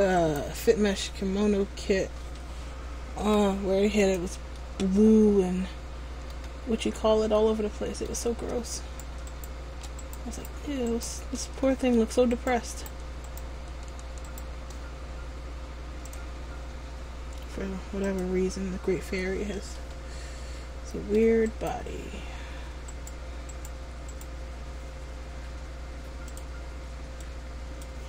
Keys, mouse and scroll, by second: 3.3 g, 4.7 middle click, 7.0 ctrl+z, 7.4 middle click, 8.9 shift+right click, 9.4 shift+right click, 10.1 right click, 11.0 shift+right click, 11.7 middle click, 12.4 right click, 14.4 right click, 14.9 shift+right click, 16.2 click, 19.8 middle click, 21.6 right click, 23.3 middle click, 23.7 right click, 24.3 right click, 26.4 click.